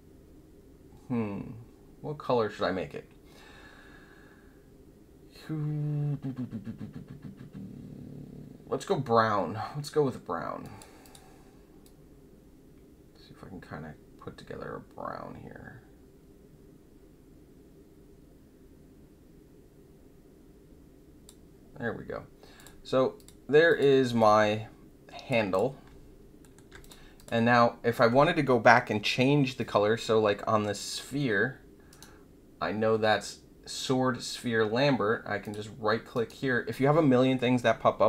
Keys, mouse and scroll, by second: 10.6 click, 11.0 click, 11.8-21.2 drag, 22.5 click, 23.1 click, 23.6 click, 24.1-25.2 alt+drag, 25.5 click, 26.4 alt+middle click, 26.8 click, 27.1 click, 35.4 click, 36.1 right click.